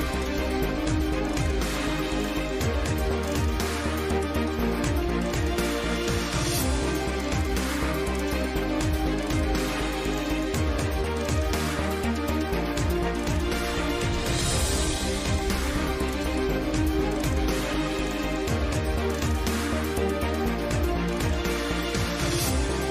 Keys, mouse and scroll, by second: 0.2 KP_5, 0.4 KP_5, 1.0 KP_7, 1.1 KP_5, 1.7 Tab, 2.8 z, 3.1 z, 3.5 KP_7, 4.3 Tab, 5.0 s, 6.2 g, 6.7 a, 7.0 ctrl+s, 7.1 KP_5, 8.8 Tab, 9.0 Tab, 9.2 Tab, 9.9 n, 10.9 Tab, 11.2 Tab, 12.2 t, 12.8 t, 14.3 Tab, 15.4 click, 15.8 g, 16.5 Tab, 17.0 Tab, 18.0 click, 18.5 Tab, 19.1 Tab, 19.8 middle click, 20.6 Tab, 21.1 Tab, 22.2 middle click, 22.4 g.